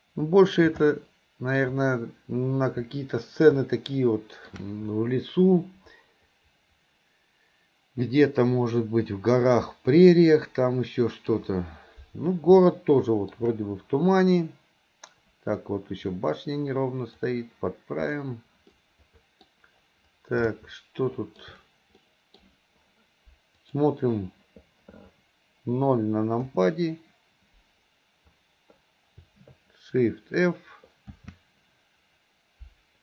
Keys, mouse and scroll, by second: 23.8 click, 26.6 KP_0, 31.2 shift+f.